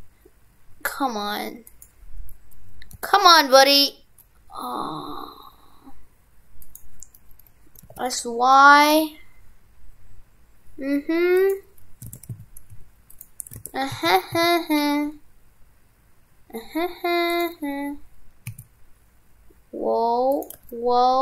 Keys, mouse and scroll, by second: 12.1 shift+f, 13.7 shift+f.